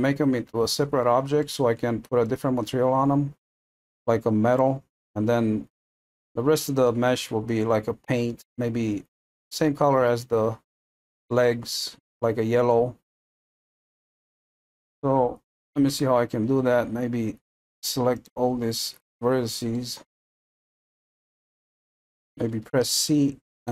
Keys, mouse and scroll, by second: 13.5-14.0 scroll up 1, 14.0-15.9 middle drag, 15.9 Tab, 18.2 click, 19.7-23.1 middle drag, 23.1 c.